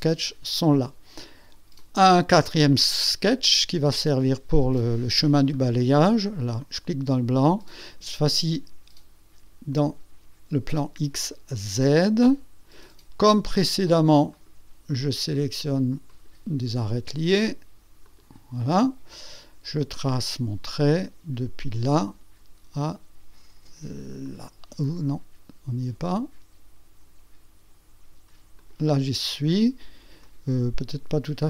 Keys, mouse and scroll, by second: 1.0 click, 1.8 click, 6.6 click, 7.4 click, 9.7 click, 11.5 click, 14.3 click, 16.1 click, 18.0 click, 20.0 click, 21.6 click, 24.2-26.3 drag, 28.6 click, 30.2 right click.